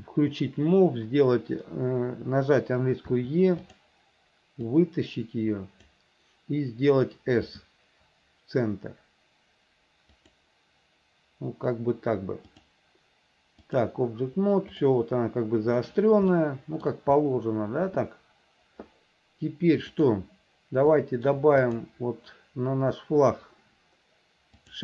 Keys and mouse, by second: 3.3 e, 4.9-6.1 drag, 7.6 s, 12.7-14.0 drag, 16.6 shift+middle click, 20.3 click, 21.1 shift+middle click.